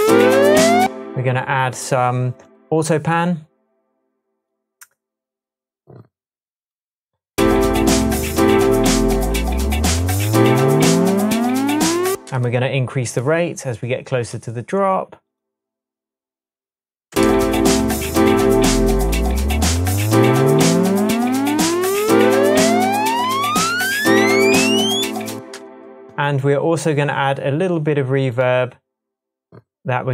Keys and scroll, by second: 0.8 space, 7.3 space, 7.4 space, 12.1 space, 17.1 space, 25.3 space.